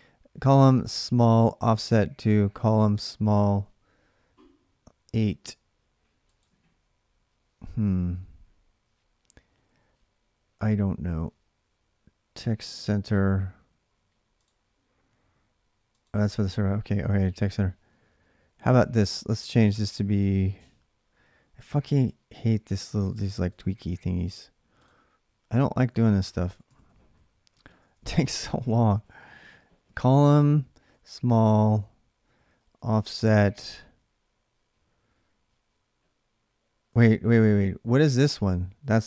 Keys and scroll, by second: 26.0-26.3 Right, 26.9 Right, 26.9 Left, 27.5-30.7 typing, 32.1-32.9 typing.